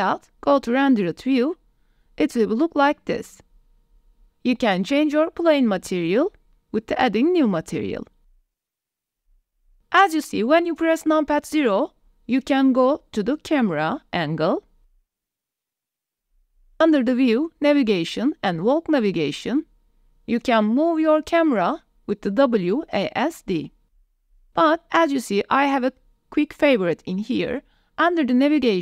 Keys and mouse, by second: 1.3 click, 1.6 click, 2.8 click, 3.0 middle click, 3.3 middle click, 3.6 g, 4.6 middle drag, 8.5 middle click, 8.8 middle drag, 9.1 middle drag, 9.9 KP_0, 12.0 click, 16.4-20.2 drag, 21.2 w, 21.4-22.2 a, 22.8 a, 22.9 shift+e, 25.1 q, 25.7 q, 28.1-28.8 drag.